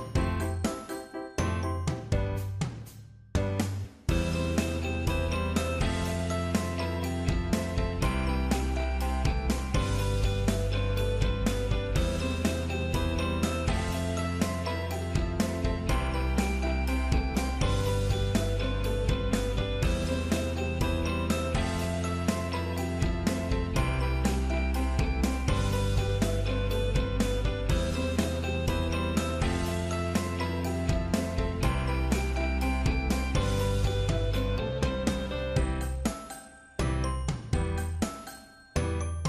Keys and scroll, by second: 0.6 ctrl+f, 9.6 shift+Right, 11.7 shift+Down, 18.1 ctrl+z, 24.1 ctrl+z, 33.4 ctrl+c, 34.2 ctrl+f.